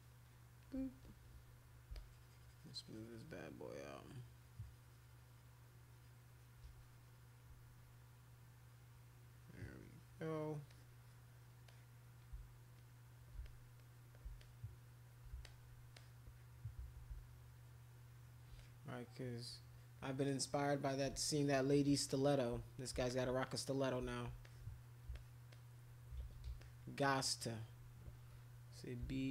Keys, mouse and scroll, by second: 0.1 shift+click, 1.9-10.5 shift+drag, 10.7 click, 11.6 click, 12.8 shift+click, 13.4 alt+click, 13.8 alt+click, 14.4 shift+click, 15.4 alt+click, 15.9 click, 17.1-18.4 shift+drag, 18.5 click, 20.2 click, 21.4 click, 22.1 click, 23.1 alt+click, 23.4 click, 24.4 alt+click, 25.1 alt+click, 25.5 alt+click, 26.2 ctrl+z, 26.6 alt+click, 29.0 b.